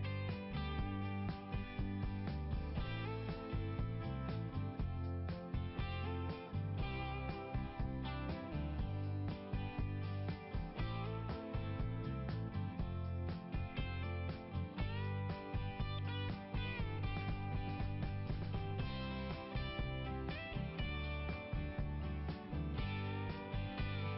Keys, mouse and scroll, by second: 5.0 click, 8.9 click, 9.0 click, 10.8 click, 11.1 click, 15.5 click, 16.8 click, 18.8 click, 19.3 BackSpace, 21.1-22.3 typing, 22.5 Return.